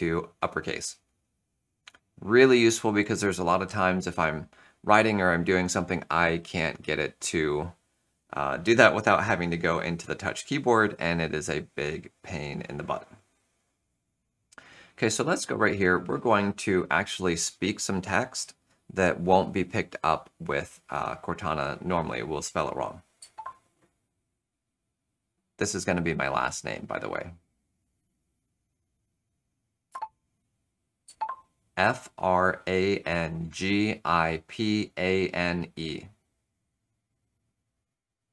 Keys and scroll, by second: 1.6 shift+F3, 23.1 super+h, 29.8 Return, 31.0 super+h.